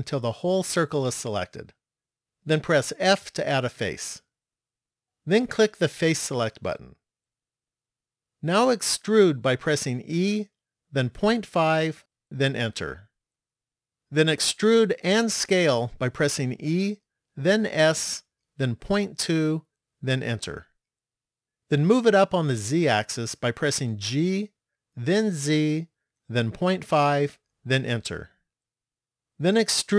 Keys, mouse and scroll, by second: 3.1 f, 6.8 click, 10.1 e, 16.2 e, 23.6 g.